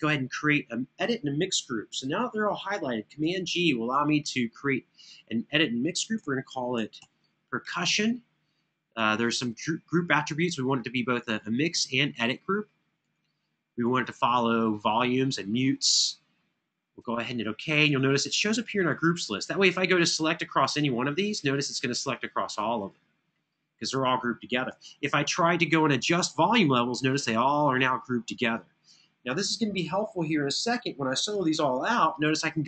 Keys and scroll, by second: 3.3 super+g, 6.0-7.3 typing, 24.5 super+=.